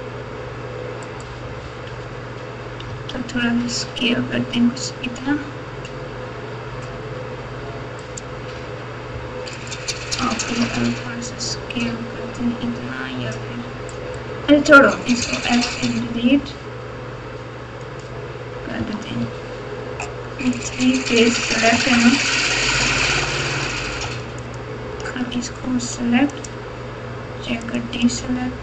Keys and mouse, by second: 1.2 right click, 2.8 s, 10.1 s, 15.1 x, 18.7 Tab, 19.2 Tab, 20.6-21.7 drag, 22.2 shift+click, 24.3 alt+click, 26.4-27.7 drag.